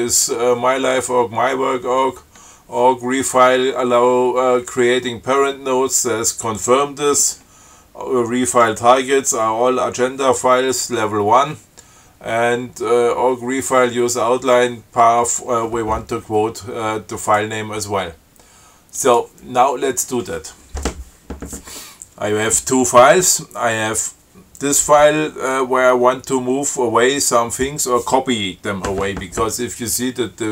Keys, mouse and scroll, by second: 17.4 click, 19.2 click.